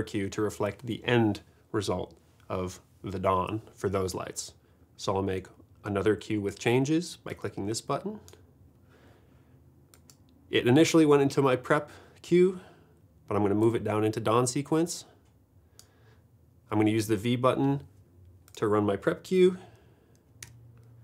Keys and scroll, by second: 20.5 v.